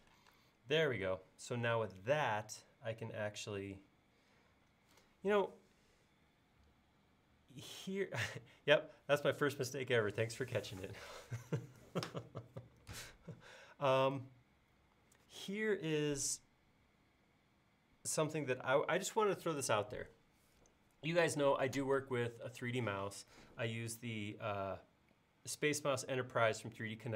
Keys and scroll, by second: 0.3 space.